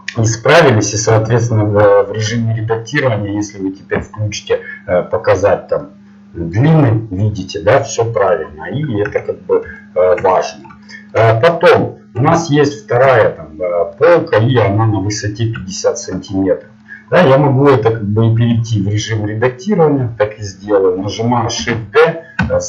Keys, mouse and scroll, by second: 1.1 Tab, 1.5-3.6 middle drag, 5.3-7.8 drag, 5.3-6.6 middle drag, 9.1 Tab, 12.8 middle click, 13.0 middle click, 15.8-18.3 middle drag, 18.3 Tab, 18.8-21.6 middle drag, 21.6 shift+d.